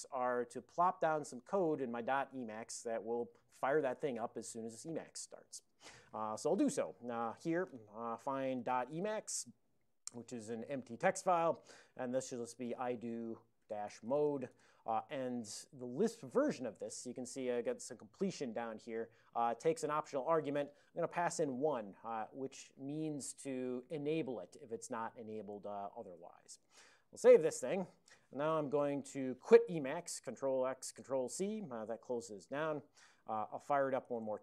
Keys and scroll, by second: 7.3 ctrl+x, 7.4 ctrl+f, 8.7-10.2 typing, 12.2-14.8 typing, 21.3-21.9 typing, 27.1 ctrl+x, 27.3 ctrl+s, 30.3 ctrl+x, 31.0 ctrl+c, 33.7-34.4 typing.